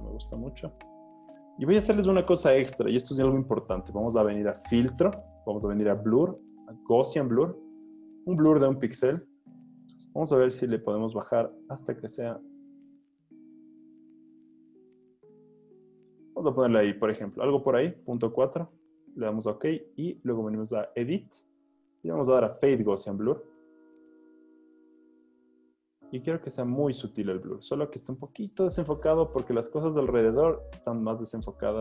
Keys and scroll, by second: 10.5 Page_Down, 10.9 Page_Down, 11.2 Page_Down, 11.4 Page_Down, 14.8 Page_Up, 16.6 Page_Up.